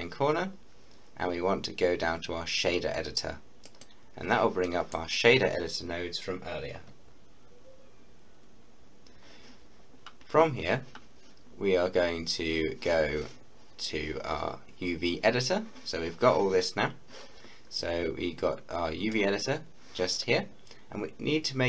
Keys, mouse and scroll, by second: 3.6 click, 4.7 middle click, 5.2-6.9 scroll down 1, 19.4-20.8 drag, 20.8-21.2 scroll up 1.